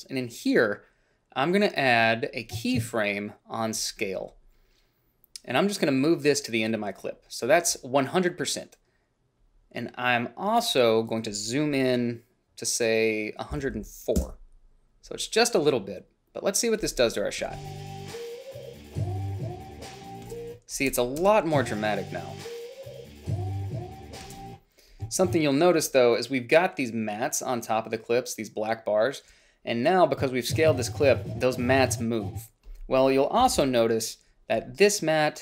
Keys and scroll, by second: 13.7-14.4 typing, 17.6 space, 20.5 space, 24.5 space, 33.6 -, 33.8 -.